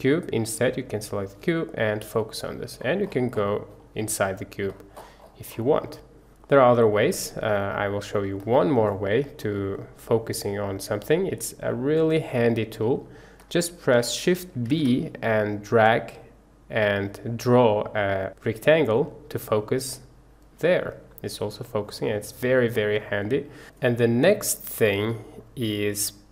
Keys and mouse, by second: 1.0 click, 2.0 KP_Decimal, 14.6 shift+b, 19.9 drag, 20.1-21.6 middle drag, 23.3-23.7 middle drag, 24.8-25.4 middle drag.